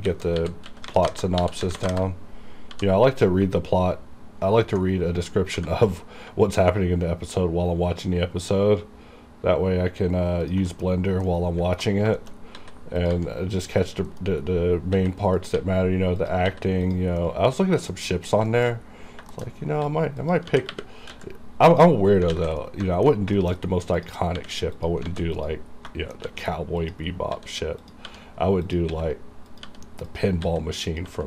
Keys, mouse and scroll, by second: 0.0 alt+r, 0.7-2.8 typing, 1.1 KP_Enter, 1.9 KP_Enter, 5.6 g, 8.1 g, 10.5 ctrl+click, 10.8 KP_Decimal, 11.3 scroll down 1, 11.4 middle click, 11.9-12.5 alt+scroll up 3, 12.3 shift+middle click, 12.7-15.6 typing, 13.1 click, 13.9 click, 14.5-15.0 scroll up 1, 15.5 click, 16.3 click, 16.9 click, 17.3 middle click, 17.7 scroll down 1, 17.9 KP_Decimal, 18.2 middle click, 18.4 scroll up 1, 18.6 shift+middle click, 18.7 shift+scroll down 1, 18.8 scroll up 1, 19.4 shift+middle click, 19.5 shift+scroll up 1, 19.9 s, 20.3 click, 20.5 g, 21.2 x, 21.8 click, 22.1 scroll down 1, 22.4 alt+a, 22.7 middle click, 23.5 shift+middle click, 23.7 shift+scroll up 2, 24.0 click, 24.1 click, 24.5 r, 24.9 click, 25.2 alt+a, 25.4 click, 25.8 scroll down 1, 26.0 shift+middle click, 26.3 shift+d, 26.9 click, 27.2 scroll up 1, 27.4-31.2 typing, 27.9 click, 27.9 click, 28.7 click, 29.6 click, 30.2 click, 30.9 click.